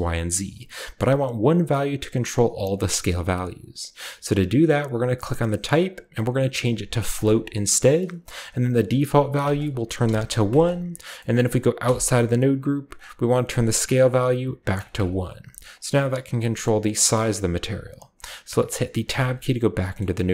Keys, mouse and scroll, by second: 5.2 click, 7.1 click, 9.4 click, 10.0 1, 10.4 click, 11.1 middle click, 11.1-14.0 scroll up 1, 11.2-12.5 drag, 11.8-14.0 middle drag, 11.8 1, 14.0-19.7 drag, 14.5 1, 19.1 1, 19.7-20.3 scroll down 1, 20.0 middle click.